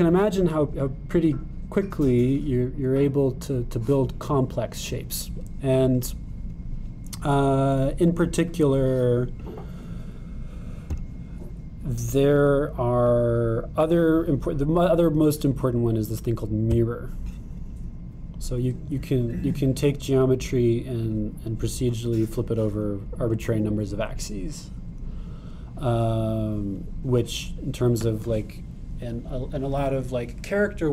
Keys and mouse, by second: 10.4 click, 12.0-18.8 drag, 18.8 middle click, 19.3 click, 19.4 middle click, 19.5-22.2 drag.